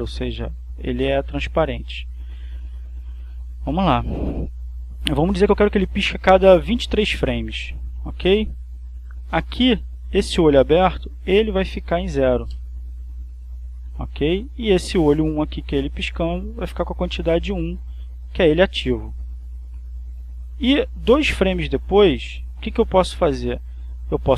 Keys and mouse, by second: 0.2 Return, 3.3 click, 4.6-8.0 drag, 11.4 click, 12.5 0, 12.8 Return, 14.7 click, 16.5 click, 17.7 1, 18.0 Return, 19.7-23.2 drag.